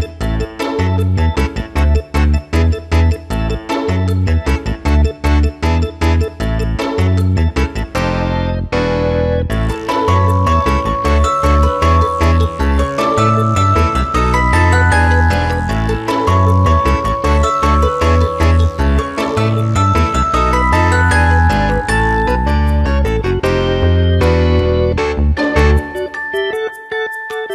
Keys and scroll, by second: 2.6 space, 3.0 space, 7.2 ctrl+y, 7.5 ctrl+space, 11.6 Return, 16.7 space, 17.9 w, 23.8 Return, 24.5 shift+F2, 25.2 ctrl+d, 25.4 ctrl+space, 26.5 ctrl+w, 27.0 Return.